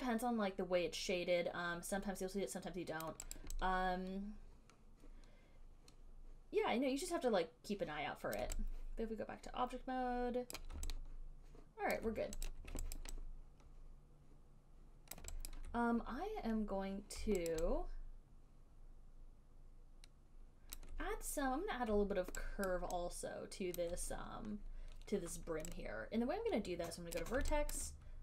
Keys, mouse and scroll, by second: 0.0 alt+right click, 0.0 alt+click, 3.2 alt+right click, 3.6 alt+right click, 8.6 alt+click, 10.8 right click, 12.2 alt+right click, 12.7 click, 13.2 alt+right click, 15.4 alt+right click, 15.7 alt+right click, 17.8 alt+right click, 21.0 alt+click, 23.0 alt+right click, 24.0 alt+click, 27.3 right click, 28.0 alt+right click.